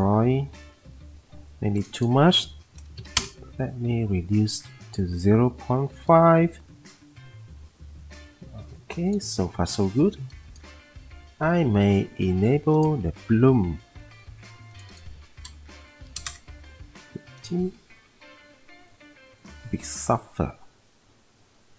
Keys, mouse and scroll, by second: 3.0 typing, 3.1 Return, 16.0 typing, 16.3 Return.